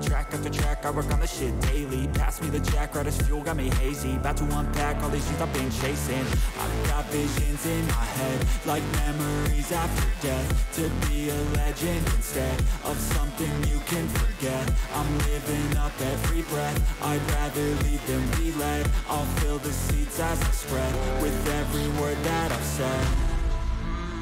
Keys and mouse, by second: 0.4 shift+click, 1.8 click, 2.1-3.4 drag, 5.6-7.0 drag, 7.8-9.2 drag, 11.2 click, 12.4 alt+h, 13.5 click, 14.2 click, 15.3 click, 16.2 shift+click, 16.5 shift+click, 18.7-19.9 drag, 20.9 click, 22.0 click, 22.6 shift+click, 23.0 shift+click.